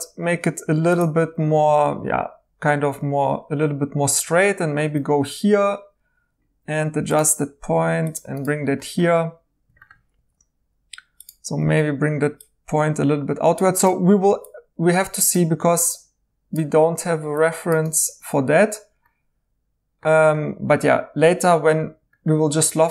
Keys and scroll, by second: 1.6 ctrl+z, 10.1 1, 11.6 g, 14.3 1, 18.0 2.